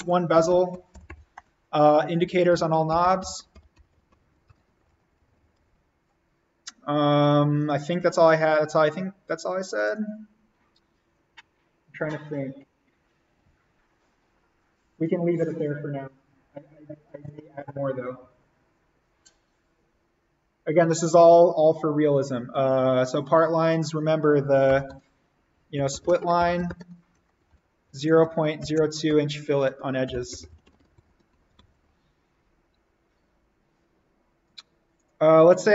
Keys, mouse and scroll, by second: 0.0-5.8 typing, 1.3 Return, 7.2 click, 8.0 space, 8.2 ctrl+click, 23.6 click, 24.6 shift+;, 25.4 s, 26.7-31.3 typing, 33.9 typing.